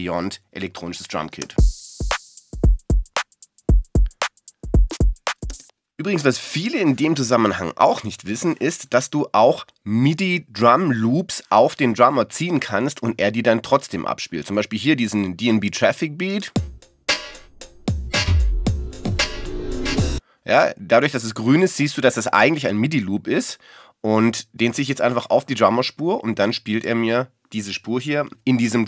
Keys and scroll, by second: 6.1 BackSpace.